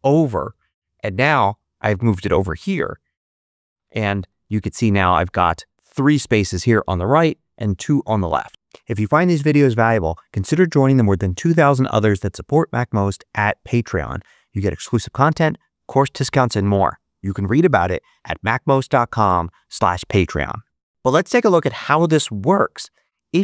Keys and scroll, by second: 4.4 ctrl+Up.